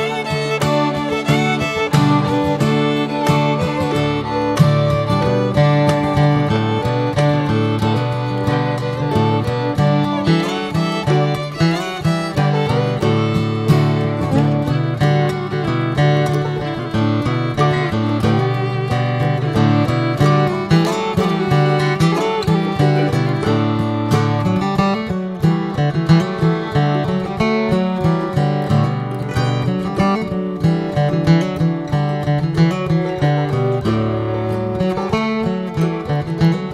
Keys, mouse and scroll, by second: 0.3 Tab, 0.8 click, 1.3 l, 2.0 l, 3.4 click, 3.8 l, 6.1 click, 6.7 Tab, 7.1 click, 7.5-8.7 middle drag, 8.7 Tab, 9.0 click, 10.1 click, 10.6 Tab, 11.0 click, 11.3-12.5 middle drag, 12.5 Tab, 12.8 click, 15.2 Tab, 15.9 click, 16.2 Tab, 16.5 Tab, 16.8 click, 17.2 l, 17.7 h, 18.2 scroll down 1, 18.6 click, 18.9 middle click, 19.2 alt+z, 19.6 click, 20.5 click, 20.7 scroll up 3, 21.1 middle click, 21.6 alt+z, 21.9-23.7 middle drag, 23.7 click, 24.0 shift+middle click, 24.7 click, 25.0 l, 25.5 h, 25.6 scroll down 1, 25.9 middle click, 26.5 alt+z, 27.5 click, 27.8 shift+middle click, 28.1 alt+z, 28.4-31.2 middle drag, 31.2-33.3 drag, 33.3 Tab, 33.4-33.8 drag, 33.8 middle click, 34.0 scroll up 2, 34.3-35.1 middle drag, 35.1 scroll up 2, 35.5-35.9 shift+middle drag, 35.9 Tab, 36.3 alt+h.